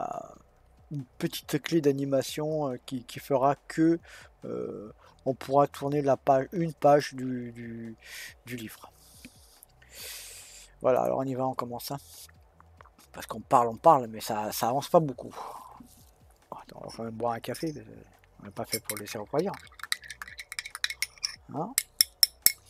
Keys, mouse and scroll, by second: 10.9 click.